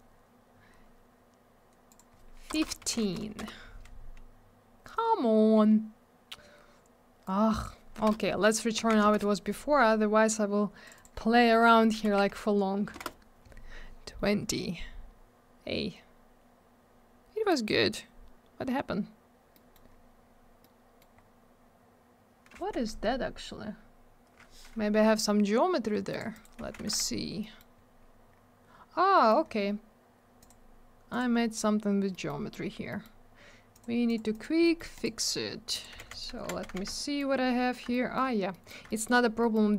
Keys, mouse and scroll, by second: 1.9 click, 1.9 click, 2.5 BackSpace, 2.8 1, 3.4 Return, 7.2 click, 8.7 1, 9.0 Return, 10.8 click, 11.0 double click, 12.0 2, 12.9 Return, 16.7-17.9 scroll down 1, 19.5 middle click, 19.7 middle click, 19.9 scroll up 1, 20.6 middle click, 21.1-21.9 scroll up 1, 22.7 F4, 23.3 scroll up 1, 23.7 scroll down 1, 26.1 click, 26.1 click, 26.3 right click, 26.4 double right click, 26.6 z, 26.9 alt+w, 27.4 middle click, 27.5 middle click, 27.7-28.3 scroll up 1, 29.1 middle click, 29.2 middle click, 29.4-29.7 scroll up 1, 30.4 click, 30.4 click, 31.1 click, 31.1 click, 32.1 middle click, 32.2 middle click, 32.3-32.9 scroll up 1, 32.9 middle click, 32.9 scroll up 1, 33.0 middle click, 33.7 click, 33.8 click, 34.0 click, 34.1 double click, 34.3 click, 34.4 click, 34.6 middle click, 34.7 double middle click, 34.9 right click, 35.0 right click, 35.7 click, 35.8 click, 36.0 alt+w, 36.1 right click, 36.2 right click, 36.3 z, 36.6 alt+w, 36.9 alt+middle click, 37.9 alt+middle click, 38.5 middle click, 38.6 middle click, 38.8 alt+middle click, 39.0 alt+double middle click, 39.4 middle click, 39.5 middle click, 39.6 scroll up 1.